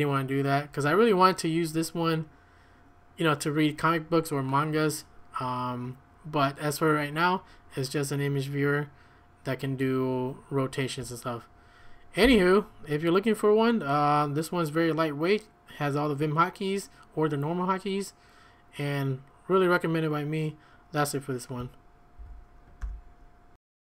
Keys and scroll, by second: 12.2 q, 22.2 ctrl+a, 22.8 0.